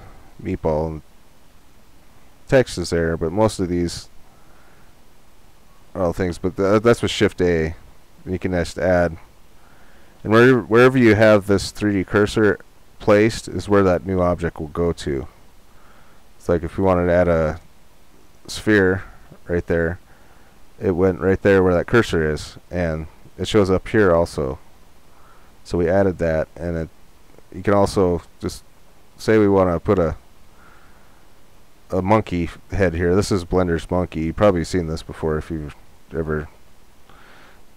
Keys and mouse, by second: 7.2 shift+a, 11.4-13.7 drag, 13.7 shift+a, 14.4 click, 30.0-35.8 drag, 37.4-37.7 drag.